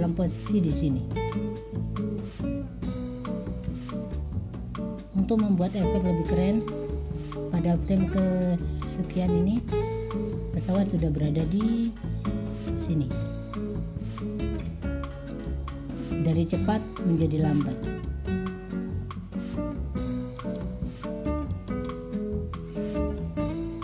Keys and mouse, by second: 0.2 click, 1.0-3.5 drag, 3.8 Delete, 6.7-8.9 drag, 10.4-11.4 drag, 11.4 middle click, 11.6 click, 11.6 middle click, 12.0 click, 12.1 middle click, 12.1 click, 12.3 middle click, 12.6 click, 14.6 i, 17.8 drag, 20.6 middle click, 21.6 middle click.